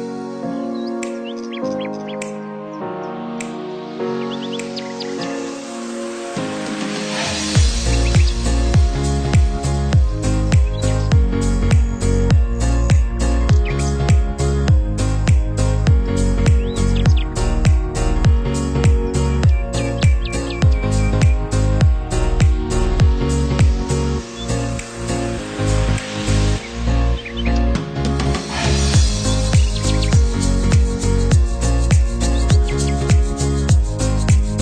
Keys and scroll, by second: 0.5 ctrl+0, 5.3 ctrl+=, 20.6 ctrl+-.